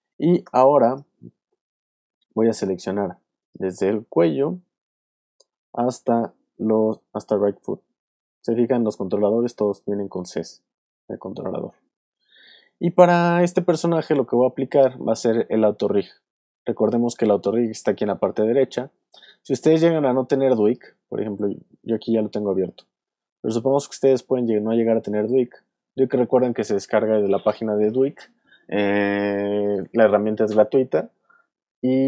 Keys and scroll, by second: 0.4 v.